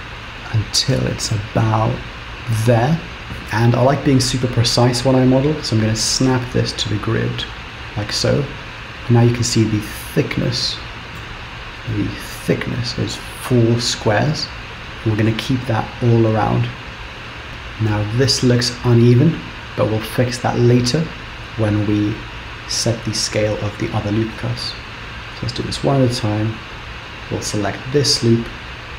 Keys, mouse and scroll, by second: 6.2 shift+s, 8.4-9.2 scroll up 1, 9.6 Return, 10.0 middle click, 10.5 Return, 11.2 KP_7, 12.0 shift+middle click, 14.2 click, 15.4-15.9 shift+scroll down 3, 17.5-18.8 scroll up 2, 25.6 click, 28.8-28.9 scroll up 4.